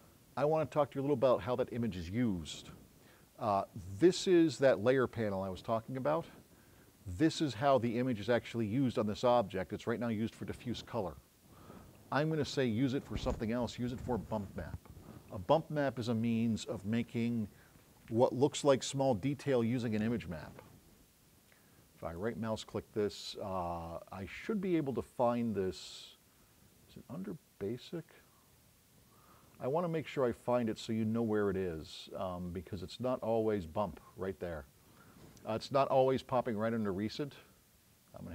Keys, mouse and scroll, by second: 22.0 right click.